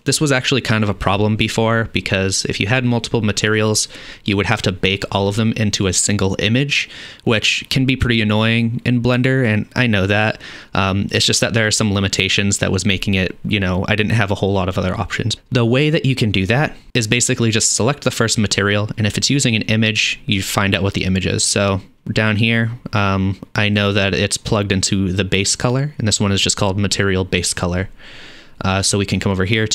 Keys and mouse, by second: 23.7 click, 24.0-26.4 middle drag.